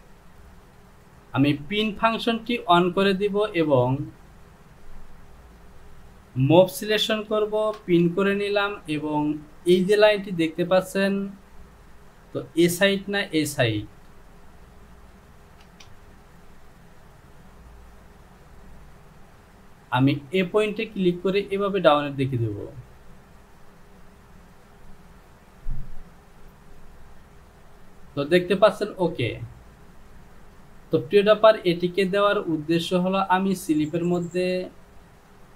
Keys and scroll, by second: 7.6 shift+f, 12.8 Home, 15.8 Return.